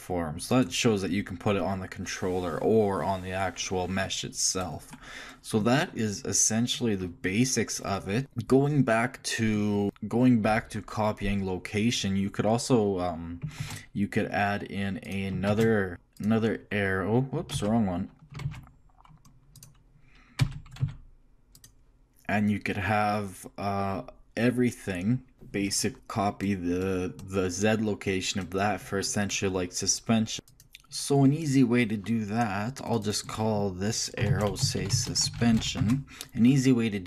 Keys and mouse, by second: 5.2 click, 13.6 shift+s, 15.5 shift+a, 17.7 ctrl+z, 18.4 shift+a, 20.4 g, 30.8 ctrl+z, 33.1-37.0 drag.